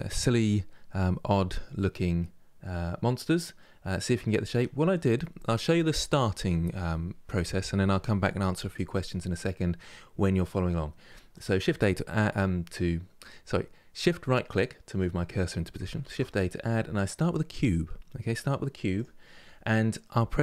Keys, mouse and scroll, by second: 0.5-6.6 middle drag, 9.1-11.0 middle drag, 11.0-14.0 shift+right drag, 15.7 shift+a, 19.7-20.4 middle drag.